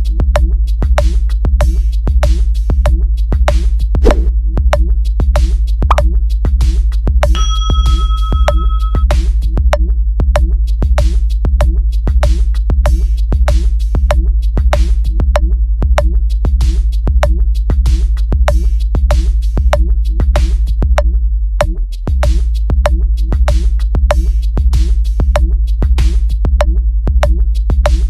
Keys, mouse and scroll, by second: 0.7 click, 3.6 click, 4.5 click, 8.6 click, 9.5-9.9 drag, 10.5 click, 11.1 click, 11.7 click, 12.3 click, 12.9 click, 13.6 right click, 15.1 click, 15.6 click, 16.0 click, 16.6 click, 17.1 click, 18.2 click, 18.7 click, 19.2 click, 19.7 click, 20.2 click, 20.8 click, 21.4 click, 22.4 click, 23.4 click, 26.0 right click, 26.8 click, 27.3 click, 27.7 click.